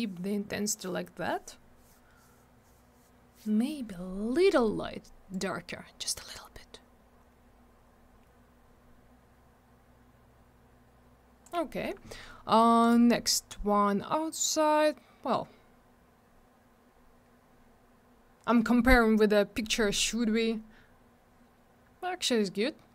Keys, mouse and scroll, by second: 5.3 click, 12.8 click, 12.9 click.